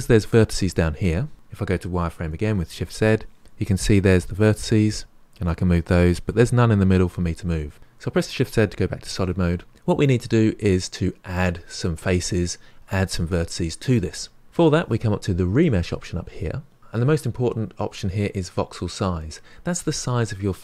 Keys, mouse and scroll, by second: 2.5 shift+z, 4.5-7.8 drag, 15.7-16.8 drag.